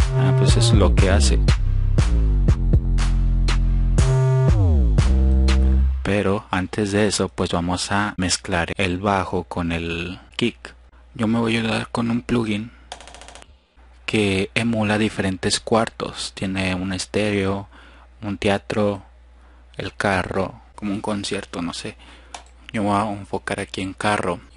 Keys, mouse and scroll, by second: 5.9-6.5 drag, 7.1 F1, 24.0 click.